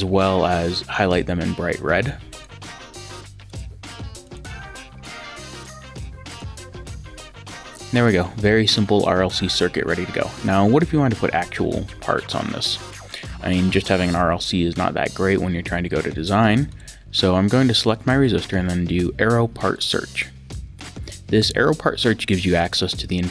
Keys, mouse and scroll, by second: 2.3 click, 3.5 click, 5.5 click, 16.7 click, 19.8 click.